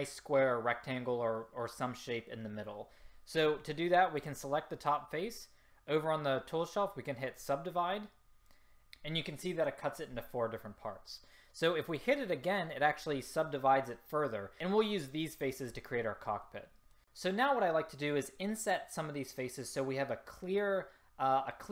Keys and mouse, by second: 4.3-8.8 drag, 12.0-13.8 drag, 16.6 click.